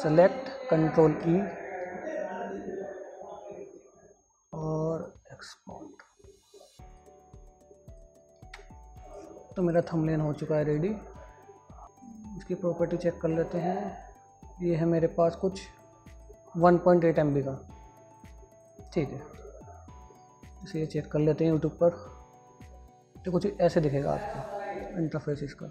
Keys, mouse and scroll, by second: 1.4 ctrl+e, 5.1 ctrl+e, 5.2 click, 10.3 super+d, 11.0 click, 19.6 click.